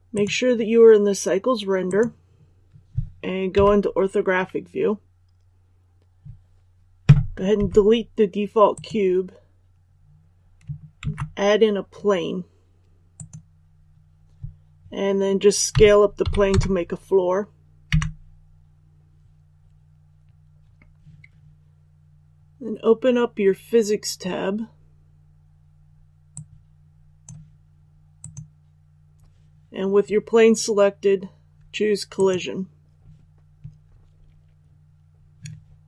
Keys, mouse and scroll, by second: 3.5 KP_5, 7.5 x, 8.6 click, 10.9 shift+a, 13.1 click, 15.7 s, 16.2 KP_1, 16.4 KP_0, 26.3-27.9 drag.